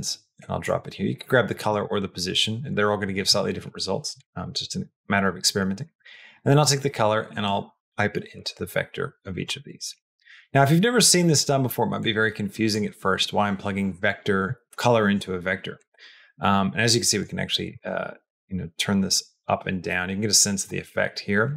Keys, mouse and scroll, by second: 1.5-2.5 drag, 4.0 click, 4.9-7.5 drag, 8.2-10.3 drag, 11.9 click, 15.7-17.0 drag, 17.5-21.5 shift+drag.